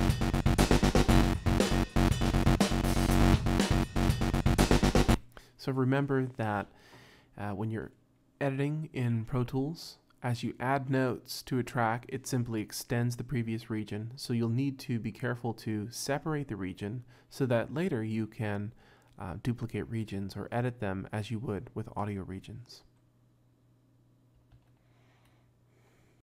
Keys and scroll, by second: 2.9 -, 5.1 space, 24.6 super+Tab.